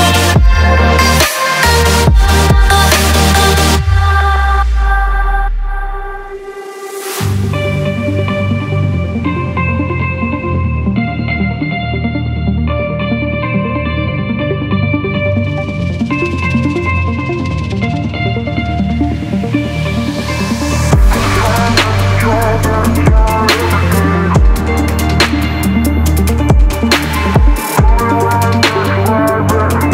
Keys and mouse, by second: 0.7-2.2 drag, 2.8-3.4 drag, 3.7 click, 4.3 Tab, 5.0 drag, 5.6 shift+drag, 6.9 3, 7.2 click, 7.7 shift+click, 8.2-8.6 middle drag, 10.4 shift+d, 12.4 p, 14.0 Tab, 14.4 click, 14.9 Tab, 15.6 a, 16.4 s, 18.3 middle click, 19.3 shift+middle click, 20.0 s, 22.5-23.6 drag, 23.8-24.5 middle drag, 25.5 click, 26.3-26.9 drag, 27.2 shift+middle click, 28.6 alt+click, 29.7 2.